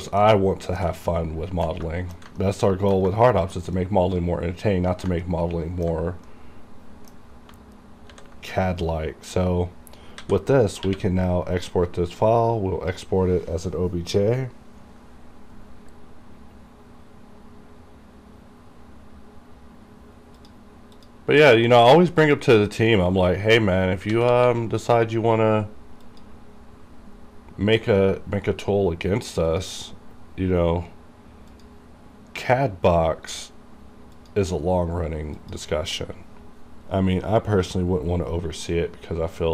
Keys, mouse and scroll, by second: 0.5 middle click, 1.1 ctrl+middle click, 1.9 ctrl+shift+middle click, 2.5 middle click, 3.2-5.2 ctrl+shift+middle drag, 5.3-6.3 ctrl+middle drag, 8.2 ctrl+s, 10.3 a, 10.9 q, 12.3-15.4 drag, 20.4 click, 20.5 click, 24.2 a, 24.3 Return, 26.1 click, 26.1 click, 29.5 click, 29.6 click, 29.7 click, 37.6 click.